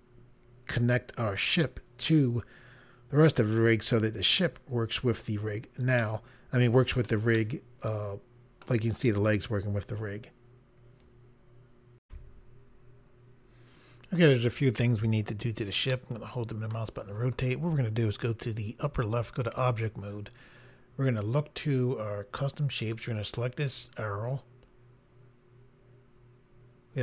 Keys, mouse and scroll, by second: 5.9 middle click, 7.3 middle click, 12.0 Pause, 15.9 middle click, 18.8 click, 19.4 click, 23.1 click.